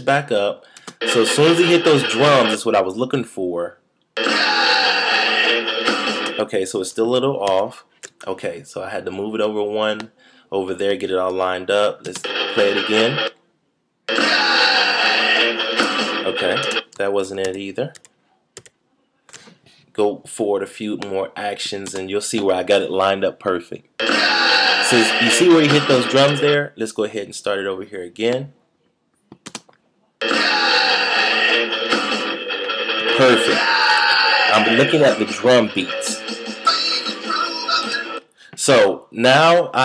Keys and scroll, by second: 7.4 shift+super+z, 17.4 shift+super+z.